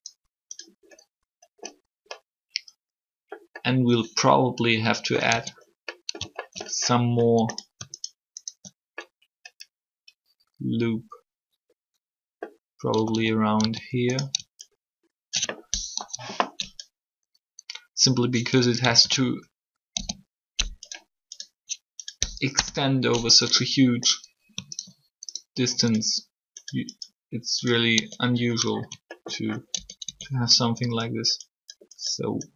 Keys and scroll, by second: 5.3 Tab, 12.9 a, 16.0 ctrl+3, 18.6 typing, 19.9 k, 22.5 Return, 28.0 Tab, 29.7 alt+shift+Tab, 30.9 Tab.